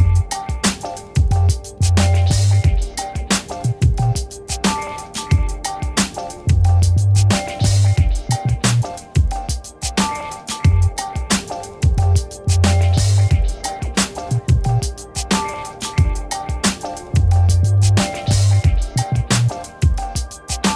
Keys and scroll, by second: 13.7 g, 19.1 ctrl+z.